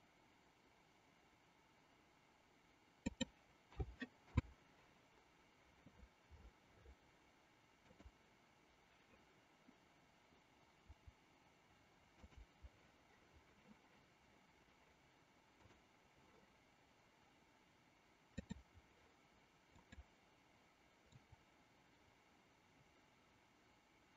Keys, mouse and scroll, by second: 3.6 a, 4.4 i, 7.9 click, 10.9 Delete, 12.1 click, 15.6 click, 18.2-19.6 drag, 19.9 click, 21.1-24.1 drag.